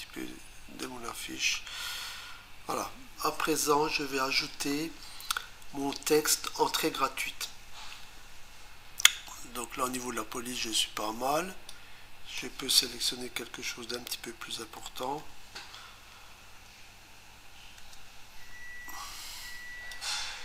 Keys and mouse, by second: 11.7 click, 15.0-15.7 typing, 17.8 Return, 19.9 click.